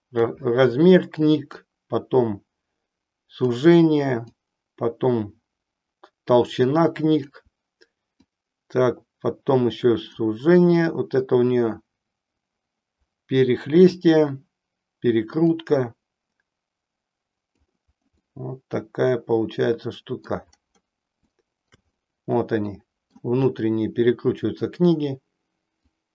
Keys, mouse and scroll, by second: 1.4-3.5 drag, 4.4-7.2 drag, 8.5-10.1 drag, 10.9-14.0 drag, 15.5-17.4 drag, 18.3-20.3 middle drag, 21.3 shift+middle click, 22.0-23.3 middle drag, 26.0-26.1 drag.